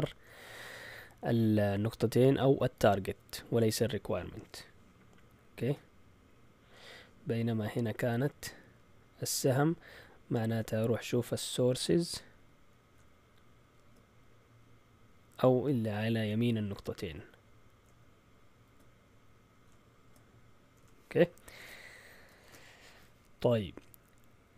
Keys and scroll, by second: 20.6 shift+super+z, 22.4 shift+super+z.